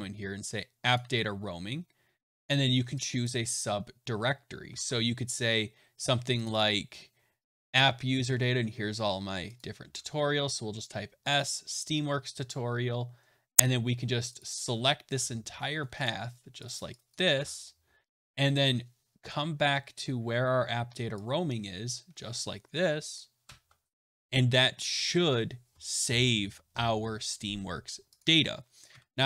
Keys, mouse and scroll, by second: 2.4 click, 3.2 click, 4.7 alt+Tab, 6.4 click, 6.5 click, 8.1-8.8 scroll down 8, 8.8-9.4 scroll, 9.5 click, 9.8 s, 11.2 click, 11.4 click, 12.4 right click, 13.5 click, 14.3 click, 15.4 ctrl+c, 16.0 click, 16.6 click, 17.0 click, 17.3 ctrl+v, 22.3 click, 23.4 BackSpace, 28.1 click, 28.9 \.